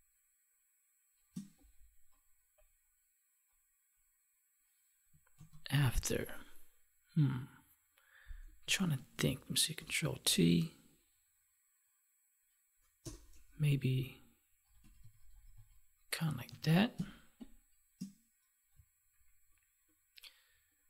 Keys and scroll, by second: 5.3 ctrl+s, 8.5 ctrl+-, 16.4 ctrl+s, 16.8 space.